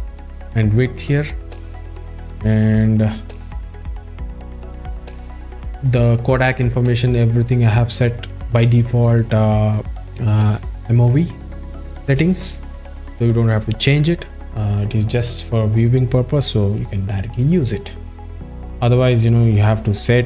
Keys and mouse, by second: 2.4 ctrl+z, 3.7-5.4 drag.